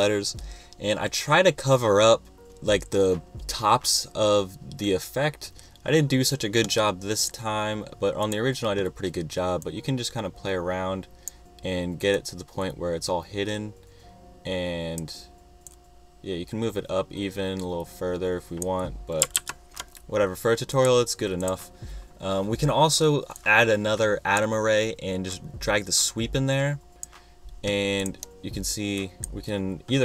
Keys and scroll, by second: 19.3 super+z.